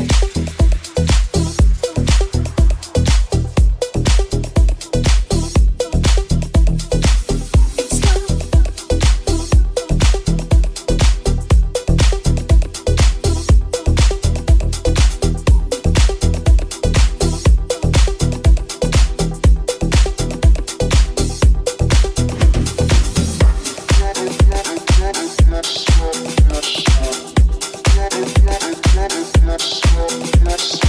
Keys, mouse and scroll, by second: 8.0 KP_1, 12.8 g, 14.0-18.7 drag, 14.0 s, 15.5 g, 17.2 s, 18.7-30.8 middle drag, 18.7 g, 19.6 r, 28.1 right click.